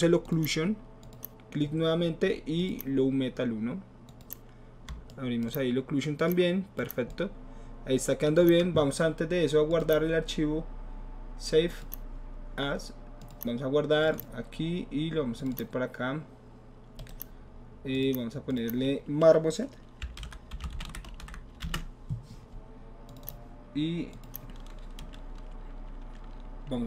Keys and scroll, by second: 19.8-21.7 typing.